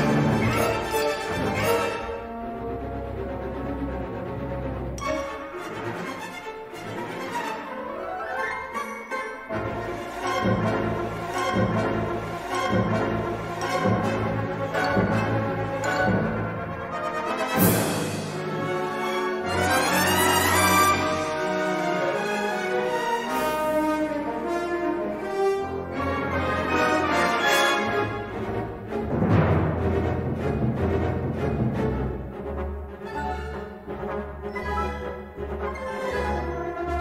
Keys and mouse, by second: 1.5 middle click, 2.1 3, 2.3 click, 3.0 i, 6.8 i, 8.4 middle click, 9.4 l, 9.7 middle click, 11.1 l, 12.1 shift+d, 13.2 g, 16.5 l, 17.2 shift+d, 17.6 g, 18.9 middle click, 20.8 shift+d, 21.4 s, 23.5 middle click, 24.5 e, 25.7 ctrl+z, 26.4 ctrl+z, 27.3 shift+d, 28.4 g, 30.4 s, 31.7 middle click, 32.7 g, 36.0 e.